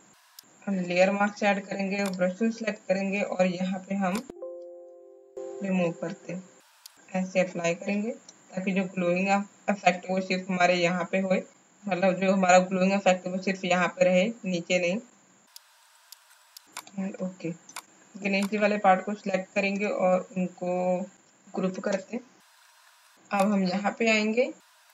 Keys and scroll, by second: 1.9 alt+b, 15.1 x, 17.6 space, 21.7 ctrl+g.